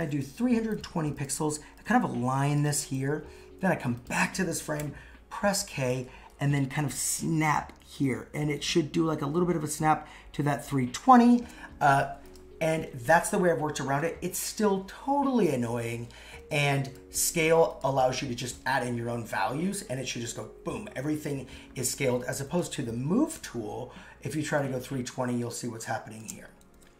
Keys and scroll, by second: 15.9 super+z, 17.9 super+x, 26.7 super+z.